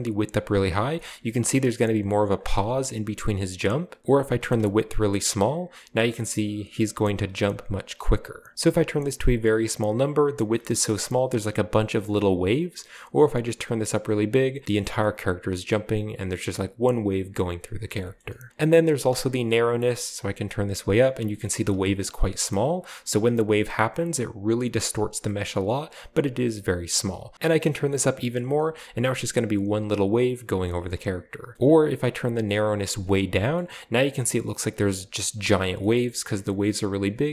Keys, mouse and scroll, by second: 0.9-1.4 shift+scroll up 1, 1.4 space, 1.8-2.3 drag, 2.6-3.5 scroll down 2, 2.6 space, 4.0 click, 4.7-10.5 drag, 5.1 typing, 11.0-11.5 drag, 11.0-11.8 middle drag, 11.0-12.2 scroll up 1, 12.9-14.3 drag, 14.5-15.4 scroll down 2, 15.5-16.3 middle drag, 16.6-17.3 scroll up 1, 17.9 shift+middle click, 18.2 shift+middle click, 18.5 middle click, 18.5 click, 18.5-19.0 typing, 19.7-22.8 drag, 21.4-22.3 scroll up 1, 21.5 typing, 23.1-24.9 drag, 25.2 drag, 25.4-26.4 middle drag, 27.0-29.1 drag, 28.6 shift+space, 28.9 middle click, 30.6-31.6 middle drag, 30.8 space, 31.6-33.0 drag, 33.0-33.9 typing, 33.3-34.3 scroll down 2, 34.4-35.4 drag, 35.8-36.7 middle drag, 37.2-37.3 drag.